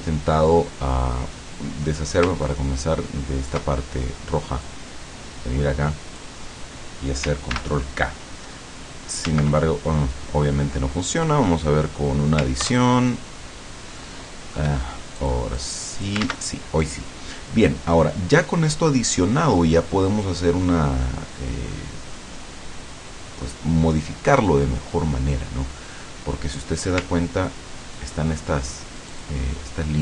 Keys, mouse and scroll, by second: 2.5-3.7 ctrl+drag, 4.7-6.5 drag, 7.6 ctrl+k, 9.3 ctrl+z, 10.2-11.5 drag, 12.7 ctrl+KP_Add, 15.3 click, 16.2 ctrl+click, 16.3 ctrl+z, 27.2-28.4 ctrl+scroll up 5, 29.1 ctrl+click.